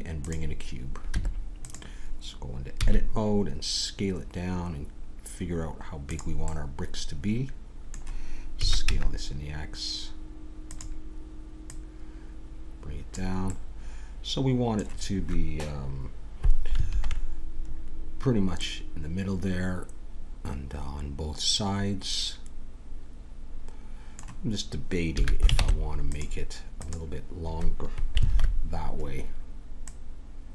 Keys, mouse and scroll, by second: 1.1 Tab, 2.8 s, 6.5 middle click, 7.3-8.5 middle drag, 8.5 s, 11.6-13.5 drag, 13.5-16.9 middle drag, 16.9 ctrl+KP_3, 17.8-19.7 middle drag, 20.4-22.3 middle drag, 23.6 middle click, 25.1 a, 25.6 ctrl+Tab, 26.8-28.4 drag, 28.3 ctrl+KP_3, 29.8-30.5 drag.